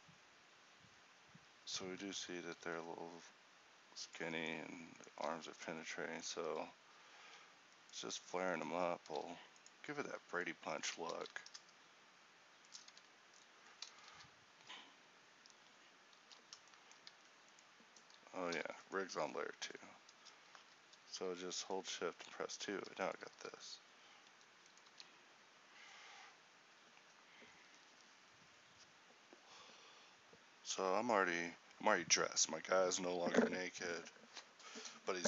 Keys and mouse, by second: 2.1 z, 2.7 alt+s, 4.3 Tab, 5.3 a, 6.5 Tab, 9.1 alt+s, 13.1 Tab, 16.3 alt+h, 17.3 a, 18.6 h, 19.7 2, 22.8 ctrl+t, 23.5 r, 25.1 g.